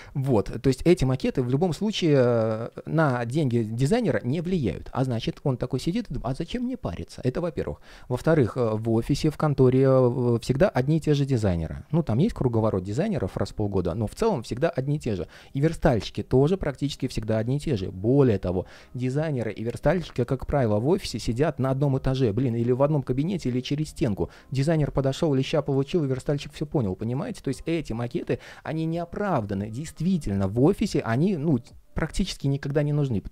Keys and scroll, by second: 8.3 super+z.